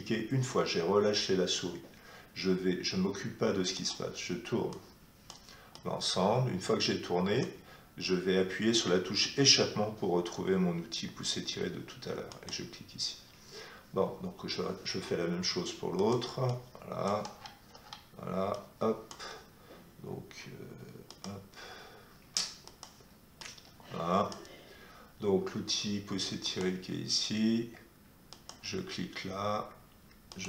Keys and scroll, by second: 11.0 Escape.